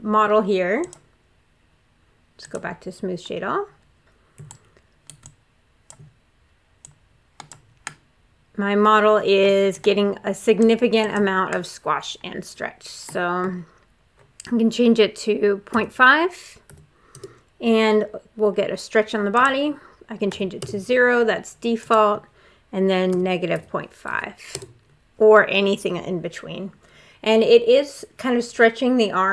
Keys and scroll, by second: 15.5 ., 16.5 5, 16.9 Return, 20.1 0, 20.4 Return, 22.9 -, 23.3 ., 23.9 5, 24.3 Return.